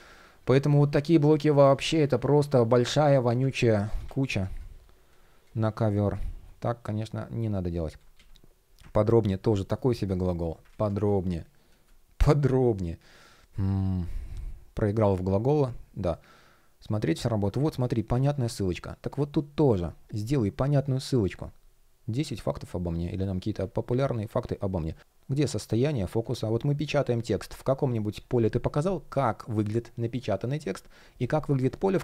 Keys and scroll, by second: 0.7 shift+p, 3.5 super+z, 9.2 shift+p, 10.2 super+z.